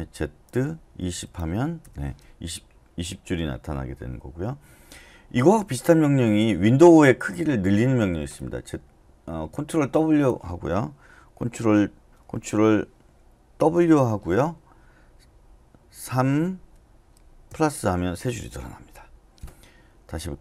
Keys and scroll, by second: 0.5-1.6 typing, 1.8 Return, 12.1 Return, 13.7 ctrl+w, 16.1 typing, 17.2-17.9 typing.